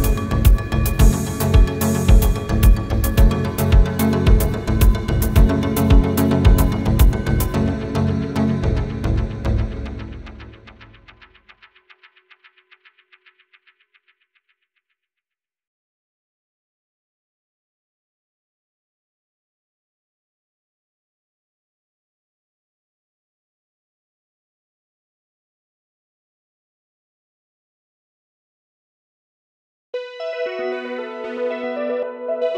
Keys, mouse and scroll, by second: 0.0 double click, 0.4 ctrl+a, 2.6 space, 2.9 middle click, 3.2 scroll down 1, 3.5 scroll up 1, 4.0 double click, 4.4 ctrl+a, 6.6 space, 6.9 scroll down 1, 7.1 middle click, 7.6 scroll down 1, 8.1 scroll up 1, 8.4 scroll down 1, 8.6 middle click, 8.9 scroll down 1, 9.0 middle click, 9.4 scroll down 1, 9.6 scroll up 1, 9.9 middle click, 10.3 scroll up 1, 11.5 e, 13.6 scroll down 1, 14.9 middle click, 15.3 space, 16.3 middle click, 16.6 scroll down 1, 19.3 typing, 19.5 Return, 19.7 scroll down 1, 20.4 x, 20.8 Return, 21.2 middle click, 21.6 scroll up 1, 22.4 middle click, 22.8 scroll down 1, 23.3 middle click, 23.7 scroll down 1, 23.8 middle click, 25.0 middle click, 25.6 scroll down 1, 28.8 middle click, 29.1 scroll up 1.